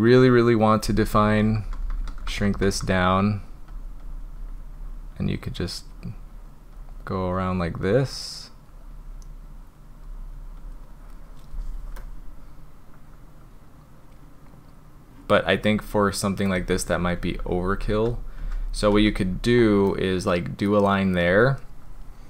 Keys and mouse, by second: 1.3-2.8 typing, 2.9 drag, 3.3 drag, 3.7 click, 4.0 drag, 4.4 drag, 4.8 drag, 5.2 click, 5.5 drag, 6.0 click, 6.3 drag, 6.8 click, 7.2 click, 7.8-8.6 drag, 9.0 drag, 9.5 drag, 10.1 drag, 10.6 click, 12.0-16.5 middle drag, 16.7 ctrl+z, 16.9 ctrl+z, 17.0 ctrl+z, 17.2 ctrl+z, 17.4 ctrl+z, 17.5 ctrl+z, 17.7 ctrl+z, 18.0 ctrl+z, 18.4 ctrl+z, 18.9 ctrl+z, 19.9 click.